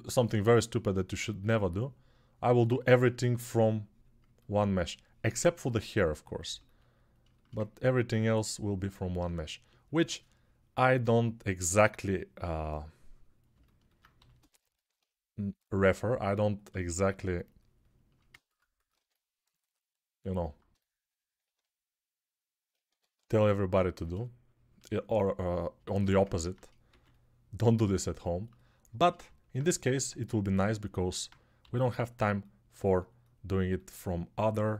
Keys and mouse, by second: 14.0 g, 18.8 2, 22.6 1, 26.7-34.7 drag, 26.7 2, 31.4 g.